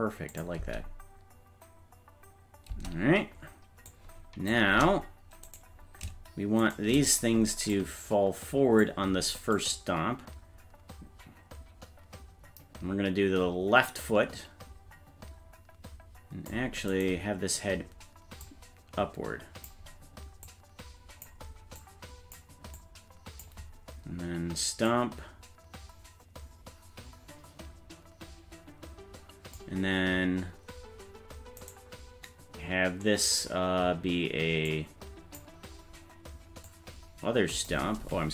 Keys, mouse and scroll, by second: 0.3 click, 0.6 space, 2.7 space, 3.9 click, 5.5 right click, 6.7 shift+right click, 7.7-8.8 drag, 9.5-16.5 drag, 17.0 right click, 18.4-19.7 drag, 20.5 click, 21.8 click, 22.8 click, 24.9-29.6 drag, 31.7-34.7 right drag, 34.7 click, 36.7-37.7 drag.